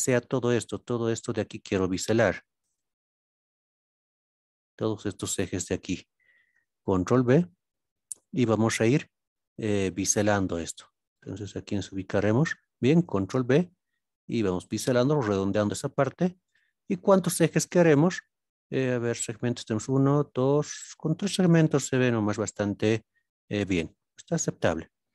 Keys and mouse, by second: 1.2-1.7 middle drag, 2.6 shift+click, 3.0-3.5 middle drag, 4.7 shift+middle click, 5.1-5.8 middle drag, 6.8 ctrl+b, 10.4 right drag, 11.2-11.5 shift+middle drag, 11.7-12.2 middle drag, 13.0 ctrl+b, 16.4 click, 22.7-23.8 middle drag.